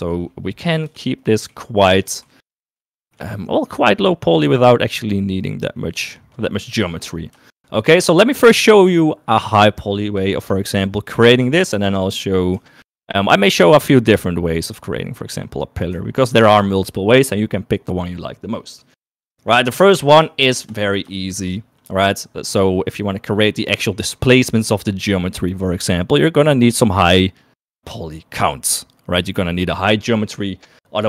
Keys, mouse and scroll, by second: 1.4 middle click, 2.7 g, 4.0 shift+middle click, 5.1 middle click, 6.9 middle click, 7.3 shift+middle click, 7.7 middle click, 8.5 shift+middle click, 13.4 middle click, 13.8 shift+middle click, 14.3 middle click, 16.9 shift+middle click, 22.0 shift+middle click, 25.1-31.0 middle drag.